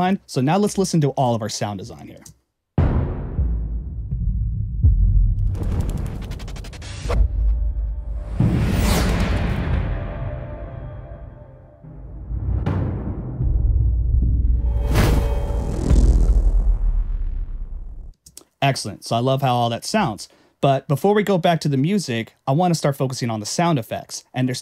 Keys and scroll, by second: 0.6 Return, 2.1 space, 18.1 space.